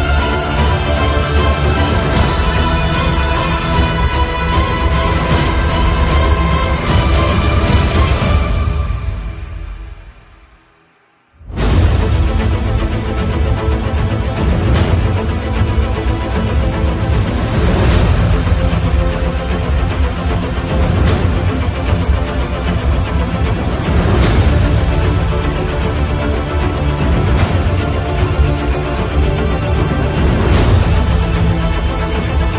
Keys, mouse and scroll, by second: 1.4 click, 1.4 typing, 3.8 click, 7.8 typing, 10.3 typing, 12.1 click, 12.1 typing, 13.9 i, 14.3 click, 16.0 ctrl+z, 19.3 ctrl+z, 19.3 typing, 19.3 click, 20.2 ctrl+z, 22.4 click, 22.4 typing, 25.1 ctrl+z, 28.0 click, 28.0 typing.